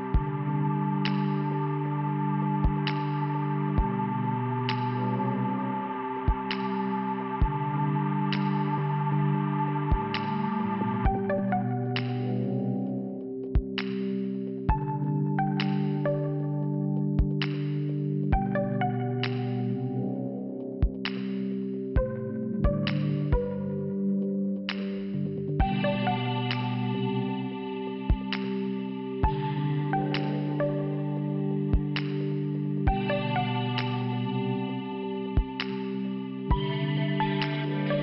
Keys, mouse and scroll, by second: 2.9 scroll down 1, 4.1 click, 5.6 click, 5.7 click, 6.7 click, 7.3 click, 9.9 click, 11.8 click, 13.1 scroll down 1, 13.7 scroll up 1, 14.3 scroll up 1, 16.3 click, 23.7 click, 24.4 click, 25.7 scroll up 2, 25.9 scroll down 1, 26.0 scroll up 1, 26.2-26.7 scroll down 3, 26.5 click, 26.8 click, 28.6 click, 31.8 shift+Return, 33.4 click, 34.9 click, 35.6 click, 36.0 click, 36.7 click, 37.3 click.